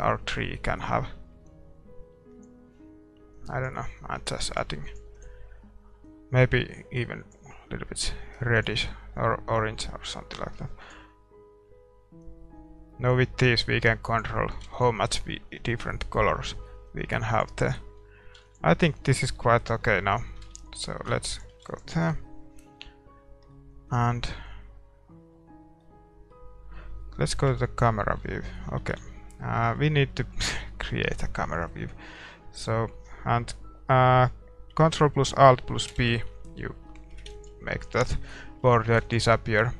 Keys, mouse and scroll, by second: 3.2-7.3 middle drag, 9.5-12.0 middle drag, 12.5 middle click, 22.7-25.4 middle drag, 25.9 middle click, 27.5 KP_0, 28.3 middle click, 29.0 shift+z, 29.4-35.9 middle drag, 35.9 ctrl+alt+b, 37.0 middle click, 37.7 ctrl+s, 39.4 ctrl+s.